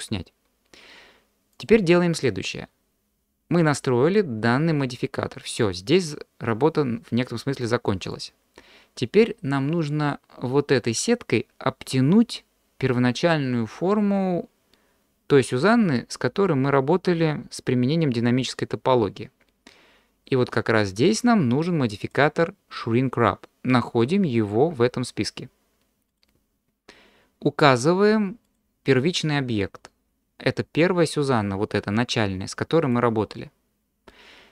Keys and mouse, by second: 3.6 click, 5.6 click, 8.1 click, 22.0-26.3 drag, 28.4-33.2 drag.